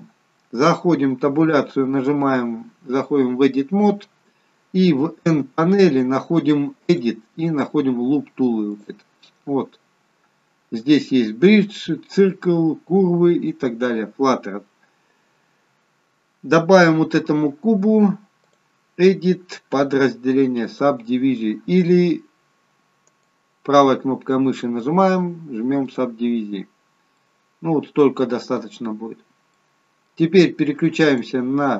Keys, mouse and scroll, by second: 0.2-1.0 scroll down 1, 1.6 Tab, 1.6 scroll down 1, 7.0 click, 8.9 click, 16.1-17.5 scroll up 1, 18.5 click, 18.5-19.2 scroll up 1, 23.3 right click, 27.3 middle click, 29.0-29.7 scroll up 1, 29.7 middle click, 31.2 click.